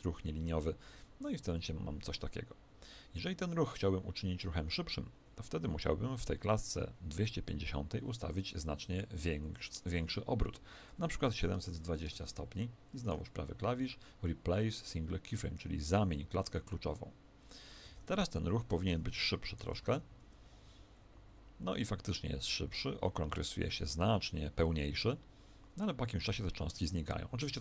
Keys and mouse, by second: 2.6 Escape, 6.6 click, 17.8 alt+a, 18.6 Escape, 19.8 alt+a.